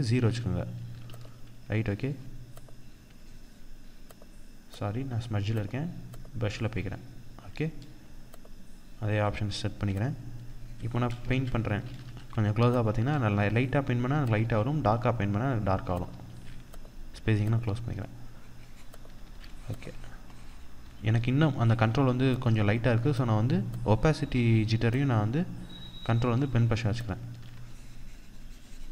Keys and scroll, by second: 0.5 ctrl+-, 10.8 ctrl+z, 11.4 ctrl+=, 12.8 ctrl+=, 13.9 ctrl+z, 26.8 ctrl+z.